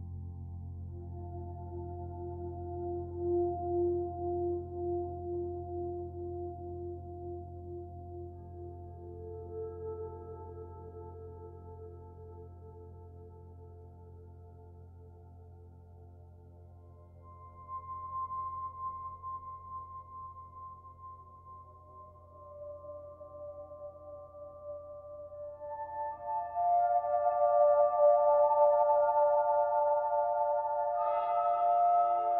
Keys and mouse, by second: 0.6 b, 0.9-3.1 drag, 1.7 b, 3.1 Delete, 3.8 click, 5.6 b, 11.3 click, 12.4 ctrl+alt+click, 12.9 alt+click, 13.7 ctrl+alt+click, 14.6 c, 15.0-17.6 drag, 17.0 Escape, 17.8-20.6 ctrl+alt+drag, 20.6 c, 21.2-23.6 drag, 23.6 Escape, 24.1 ctrl+alt+click, 24.8 alt+shift+click, 25.7 Delete, 25.8 click, 26.3-28.9 drag, 28.8 1, 30.0 click, 31.7-32.3 drag.